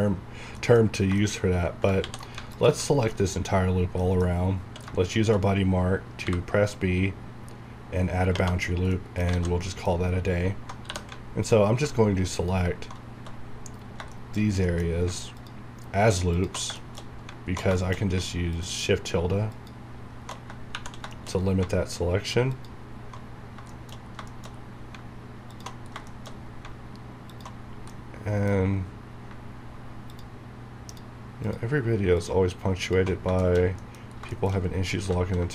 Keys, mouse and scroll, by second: 0.6 middle click, 1.4 shift+scroll up 2, 2.9 alt+scroll down 2, 3.1 middle click, 4.3 scroll up 1, 4.7 q, 5.1 shift+click, 6.3 b, 8.7 scroll down 1, 8.9 middle click, 9.6 middle click, 9.8 scroll down 1, 10.1 scroll up 1, 12.4 alt+shift+click, 13.6 scroll down 1, 14.1 shift+middle click, 14.4 shift+scroll down 1, 14.7 middle click, 14.9 scroll up 1, 15.4 alt+shift+click, 16.8 middle click, 17.1 scroll up 1, 17.8 shift+middle click, 18.6 alt+shift+click, 21.1 shift+middle click, 21.4 shift+scroll up 2, 22.5 alt+shift+click, 23.4 scroll down 1, 23.7 shift+middle click, 24.0 shift+scroll down 2, 24.3 shift+middle click, 24.5 shift+scroll up 2, 25.5 alt+shift+click, 25.8 shift+scroll down 1, 26.1 shift+middle click, 26.4 scroll up 1, 27.3 alt+shift+click, 27.6 shift+scroll down 1, 27.9 middle click, 28.6 scroll up 1, 30.1 click, 33.2 shift+scroll down 1, 33.4 shift+middle click, 34.1 scroll down 1, 34.3 shift+middle click, 34.9 scroll up 1.